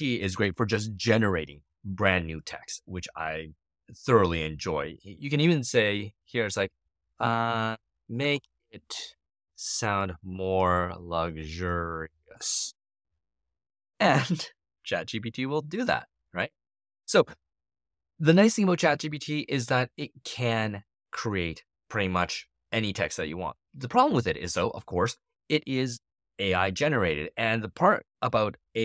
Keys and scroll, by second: 7.5-12.7 typing.